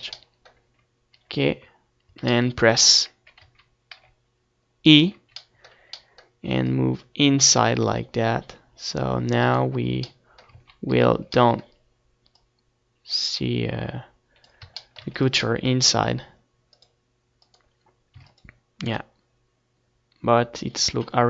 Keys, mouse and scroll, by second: 0.3 z, 0.7 z, 1.6-2.7 middle drag, 1.6 z, 3.0 z, 3.6 e, 4.7-6.5 middle drag, 4.7 z, 6.5-8.2 drag, 9.2 right click, 9.8 middle click, 10.1 click, 10.3 ctrl+z, 10.7 ctrl+z, 12.2-14.1 drag, 14.5 Tab, 14.8 ctrl+s, 16.5-18.0 drag, 17.9 ctrl+s, 20.9 Tab.